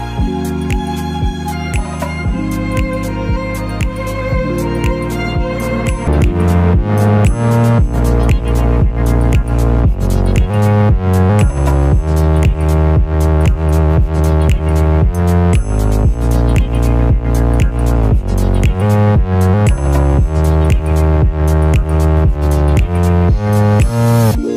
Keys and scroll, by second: 1.6-2.2 typing, 3.3-6.2 typing.